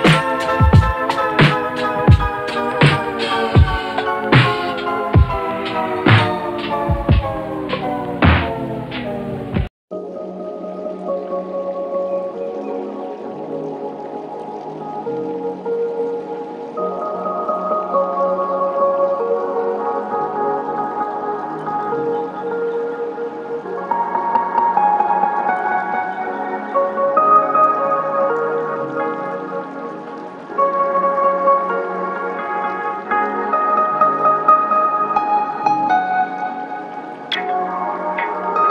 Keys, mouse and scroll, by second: 0.4 alt+click, 0.7 alt+click, 0.9 ctrl+z, 1.8 r, 4.0 r, 5.9-6.6 alt+drag, 7.1 alt+drag, 7.9 click, 8.6 click, 8.7 alt+click, 9.6 alt+click, 12.0 click, 15.6-18.1 drag, 18.5 ctrl+s, 18.9 click, 20.3 click, 20.8 click, 22.8 click, 32.1 drag, 32.7 ctrl+s, 33.1-33.6 alt+drag, 33.7 alt+drag, 35.0 click, 36.5 shift+a, 37.5-38.2 drag.